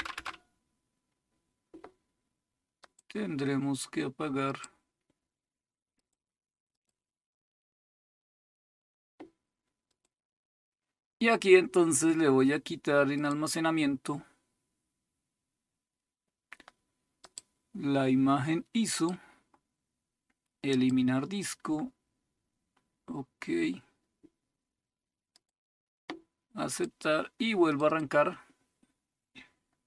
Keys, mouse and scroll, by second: 0.1 Return, 2.8 click, 4.4 click, 4.8 click, 6.0-7.6 drag, 9.9 click, 13.2 click, 17.2 click, 18.9 click, 20.7-22.9 drag, 25.4 click, 26.7 click, 27.5 click.